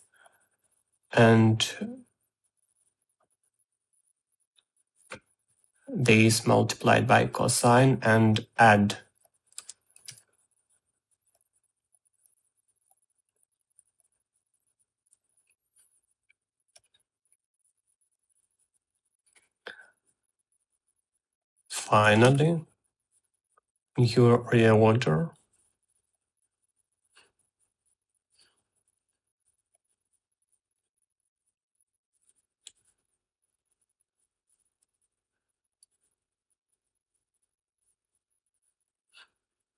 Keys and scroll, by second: 0.8 ctrl+c, 1.0 v, 10.3-11.3 typing, 22.6-23.5 typing.